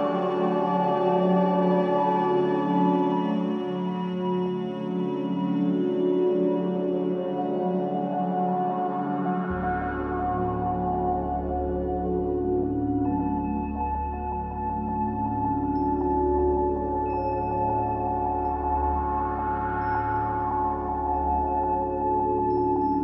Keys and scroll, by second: 0.0 r, 0.1 e, 0.2 s.